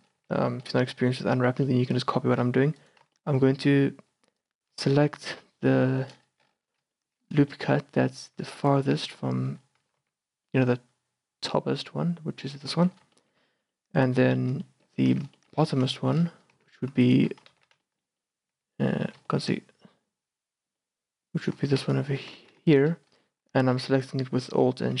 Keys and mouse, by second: 0.3 z, 0.6 middle click, 0.8 a, 1.7 middle click, 1.9 middle click, 2.1 middle click, 2.8 click, 3.6 a, 3.6 middle click, 3.7 click, 3.8-4.9 middle drag, 4.9 click, 5.4 KP_Decimal, 6.7 middle click, 7.0 middle click, 7.6 middle click, 7.9 click, 8.4 a, 9.3 click, 10.0 z, 10.1 middle click, 10.8 click, 10.9 middle click, 11.0 click, 11.1-12.2 middle drag, 11.2 click, 12.2 middle click, 13.6 middle click, 14.2 z, 15.2 z, 16.0 middle click, 16.2 middle click, 16.6 z, 17.1 middle click, 17.6 ctrl+z, 18.0 click, 18.1 middle click, 18.3 click, 18.5 middle click, 18.5 click, 18.6 z, 20.8-21.9 middle drag, 21.9-23.2 drag, 22.5 ctrl+z, 23.2 middle click, 23.4 click, 23.4-25.0 middle drag.